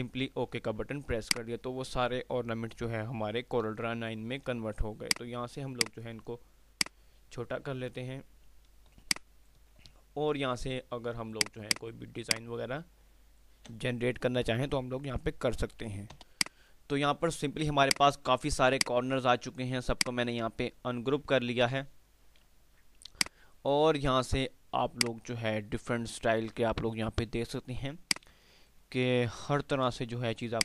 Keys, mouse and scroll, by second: 1.3 click, 3.7 F3, 5.2 click, 9.1 F2, 9.3 click, 9.7 F2, 11.5-16.3 drag, 19.9 F2, 20.1-23.2 drag, 23.2 click, 25.1-26.7 drag, 26.7 ctrl+z, 27.9 F2, 30.4 click.